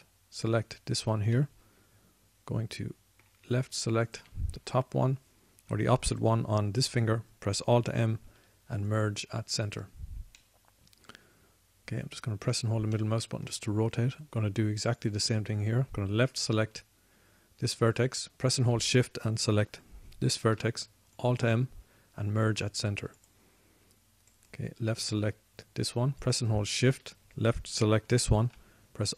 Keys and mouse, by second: 3.3 middle click, 5.4-9.3 drag, 9.3 alt+m, 10.5 alt+m, 14.3 click, 14.7-16.4 middle drag, 21.7 alt+m, 24.8-26.2 drag.